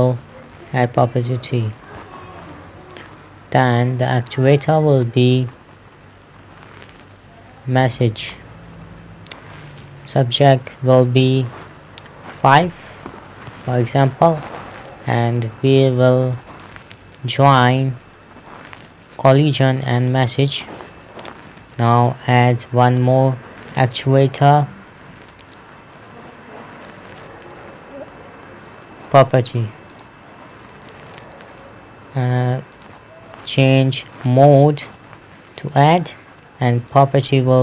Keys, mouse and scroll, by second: 1.9 Return, 4.5 click, 8.6 click, 10.2 middle click, 11.5 click, 13.1 KP_5, 13.5 Return, 16.4 click, 22.9 click, 30.4 click, 31.3 middle click, 33.2 click, 36.2 click.